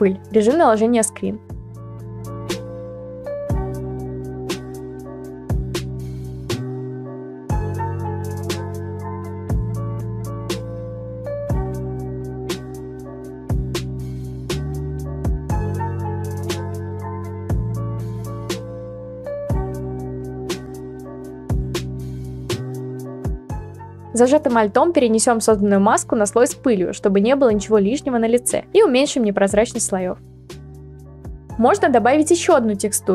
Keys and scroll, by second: 0.0-1.1 typing, 0.9 ctrl+v, 2.8 ctrl+t, 5.6 Return, 9.7 ctrl+v, 11.3 ctrl+t, 18.1 Return, 30.8 ctrl+v, 32.0 ctrl+t.